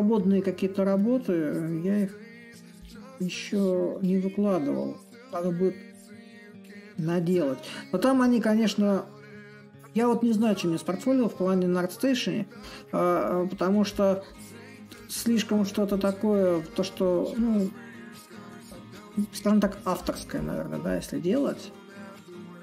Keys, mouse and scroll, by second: 6.3-9.6 middle drag, 9.6-11.3 drag, 12.3-17.3 drag, 17.6-22.6 drag.